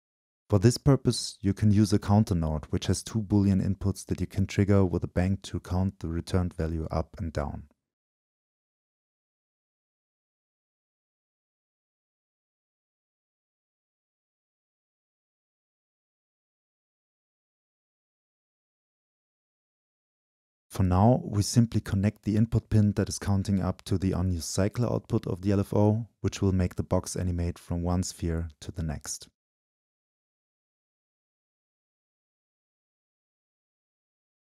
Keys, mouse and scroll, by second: 0.1-2.9 shift+drag, 3.8-6.0 drag, 6.0-6.6 middle drag, 6.6-7.9 drag, 7.9-8.6 middle drag, 8.6-9.1 drag, 9.1 middle click, 9.2-14.2 drag, 21.2-23.2 drag, 23.2-24.4 scroll down 2, 24.4-27.0 drag, 27.0 Delete, 27.4-32.0 drag, 32.0-34.4 middle drag.